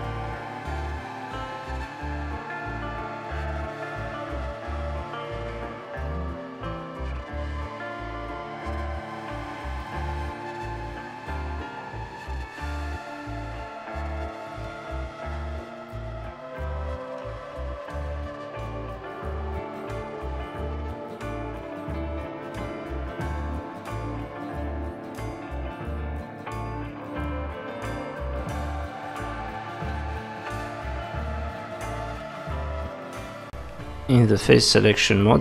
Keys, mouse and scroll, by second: 0.6 g, 1.5 click, 1.8 g, 2.6 middle click, 3.1 click, 3.4 g, 4.2 middle click, 9.0 ctrl+r, 10.6 middle click, 10.9 click, 11.9 click, 13.9 middle click, 13.9 click, 15.6 middle click, 15.6-16.0 scroll down 3, 19.4-20.0 scroll up 3, 20.2 click, 20.6 g, 22.8 click, 23.2 g, 24.4 click, 24.8 g, 26.5 click, 26.9 g, 28.5 click, 29.0 g, 30.3 middle click, 31.9 click, 32.2 g, 33.4 middle click, 34.1 scroll down 3, 34.4 middle click.